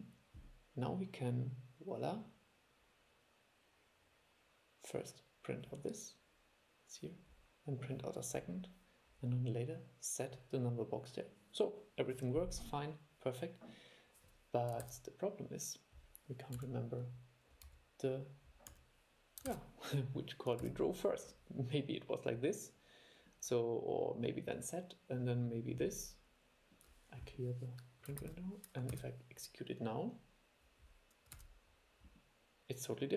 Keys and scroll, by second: 15.0 super+e, 19.7 super+e, 20.8 super+e, 28.4 shift+super+l, 29.1 super+e, 31.5 super+e.